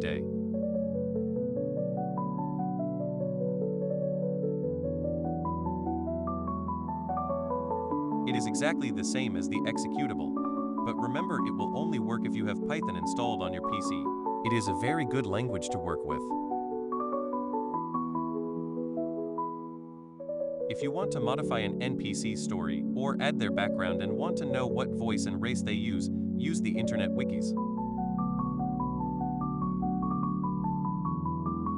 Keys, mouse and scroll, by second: 0.0 click, 0.8 click, 2.5 click, 4.2-6.4 drag, 7.5 click, 9.6 click, 10.7 click, 12.0 click, 13.5 click, 15.3 click, 18.8 click, 21.0 click, 21.6 click, 21.9 click, 22.1 click, 22.3 click, 22.4 click, 22.6 click, 22.8 click, 23.0 click, 23.2 click, 25.0 click, 27.8 click, 29.8 click.